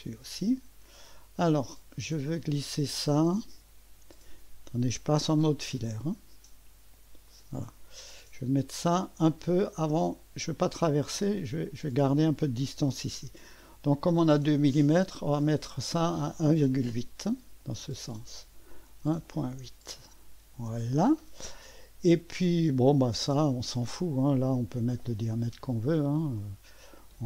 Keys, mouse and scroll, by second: 0.0 click, 2.1-4.9 drag, 6.0 click, 7.3 click, 8.0-8.4 scroll up 1, 9.4-12.0 drag, 14.7 click, 16.0 click, 17.8 click, 18.5 click, 18.7-19.6 typing, 20.7 Return, 21.0 typing, 25.3 click, 26.4 click, 27.0 click.